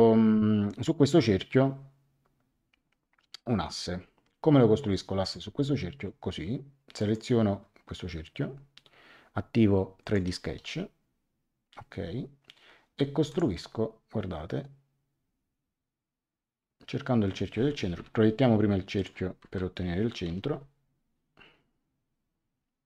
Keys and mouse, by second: 5.2 click, 6.9 click, 10.0 click, 13.2 click, 17.9 p, 18.9 click, 19.4 Return, 20.2 l.